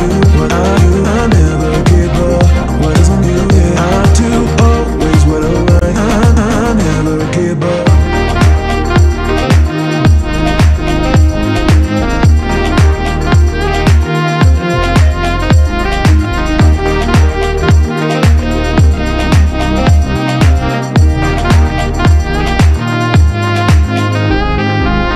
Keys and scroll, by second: 1.1 Return, 1.5 Escape, 2.2 Delete, 2.7 alt+a, 3.3 Escape, 6.6 Return, 11.1 Escape, 17.5 Return, 18.9 Escape, 25.0 Return.